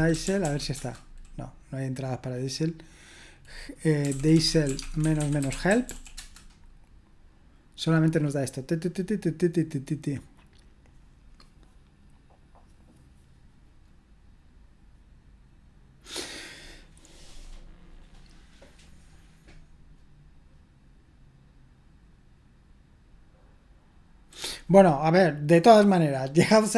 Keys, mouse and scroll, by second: 0.0-0.9 typing, 3.8-6.3 typing.